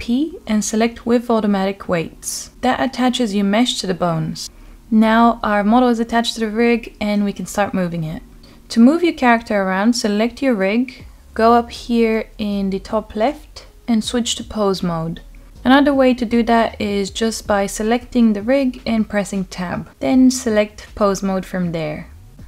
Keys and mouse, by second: 10.1 middle click, 10.2 n, 11.1-13.7 drag, 16.1 click, 19.0 click, 19.6 click, 20.4-21.0 middle drag, 22.1 click.